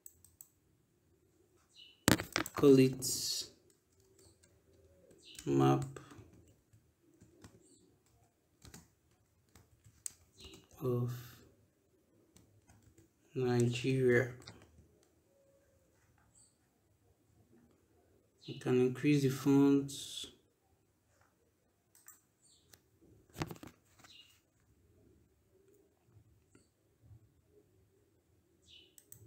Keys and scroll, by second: 3.5 ctrl+BackSpace, 5.2-8.5 typing, 9.5 shift+o, 10.0 shift+f, 10.2 shift+space, 10.5 shift+n, 12.6-14.3 typing.